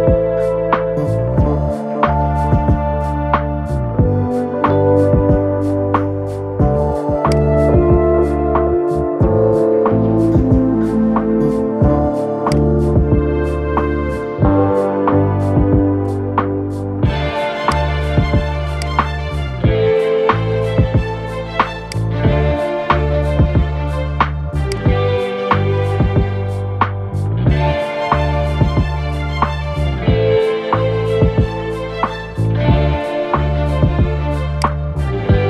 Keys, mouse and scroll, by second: 0.5 scroll down 5, 1.7-4.5 scroll down 6, 7.0-9.2 drag, 9.2-9.6 scroll up 2, 12.2-13.9 drag, 13.9-16.8 middle drag, 20.9-21.6 scroll down 2, 21.6-23.2 drag, 23.2 scroll down 3, 23.7 Tab, 24.4 click, 24.9 scroll up 2, 26.6-28.5 middle drag, 28.5 scroll down 5, 28.8-29.9 middle drag, 29.9 scroll down 4, 30.7-32.6 middle drag, 32.6 scroll up 3, 33.1-34.3 middle drag, 34.3 click.